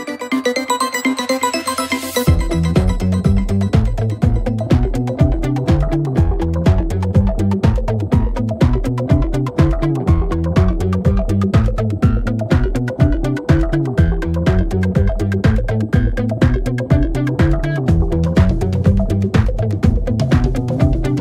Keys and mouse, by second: 3.0 middle click, 3.6 middle click.